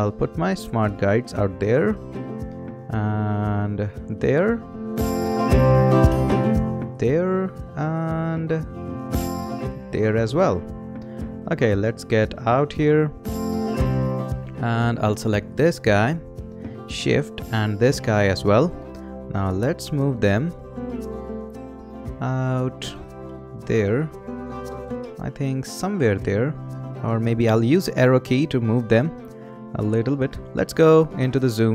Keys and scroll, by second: 27.8 Left.